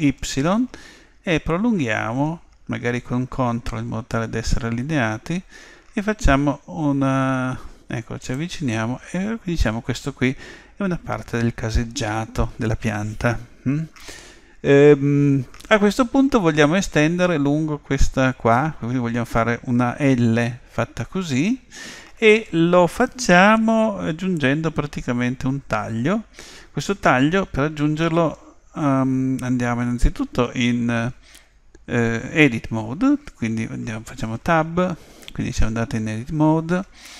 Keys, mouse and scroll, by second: 34.3 Tab.